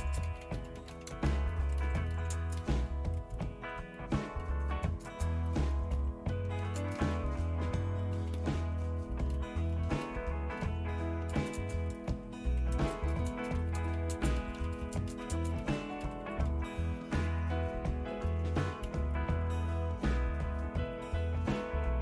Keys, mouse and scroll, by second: 0.0-3.1 typing, 5.4-11.4 typing, 12.6-17.5 typing, 18.6-19.5 typing.